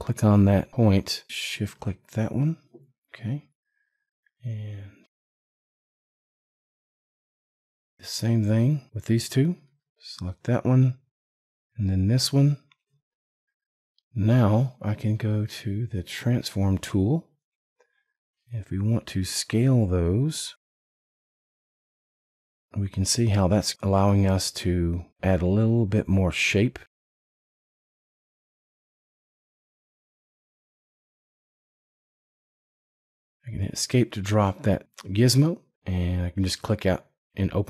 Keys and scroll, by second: 33.3 Escape.